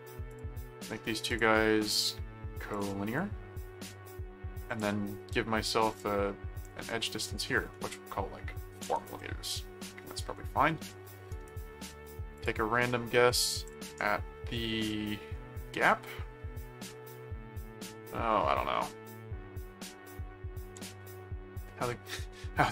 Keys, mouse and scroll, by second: 0.3 ctrl+click, 1.3 ctrl+click, 2.7 click, 3.9 right click, 4.7 click, 5.9 click, 6.6 click, 8.8 4, 9.0 Return, 9.0 m, 11.3 right click, 12.4 click, 13.3 click.